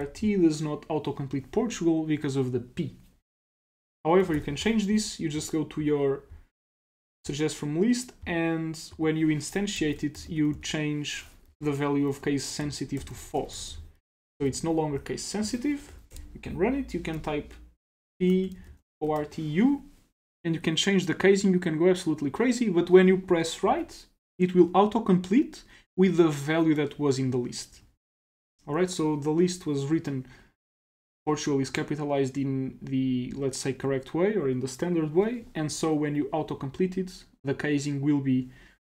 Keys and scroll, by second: 0.0-0.5 typing, 3.7 BackSpace, 3.9 BackSpace, 3.9 BackSpace, 4.1 BackSpace, 4.4 ctrl+c, 9.6-11.0 typing, 11.5 Down, 11.6 Tab, 12.7-14.0 typing, 15.9 Up, 16.1 shift+Return, 18.0-19.4 typing, 23.7 Tab.